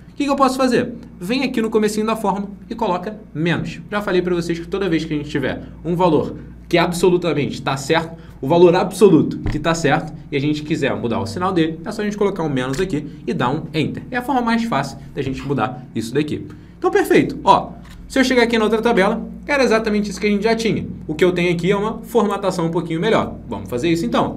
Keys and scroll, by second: 17.8 alt+Tab.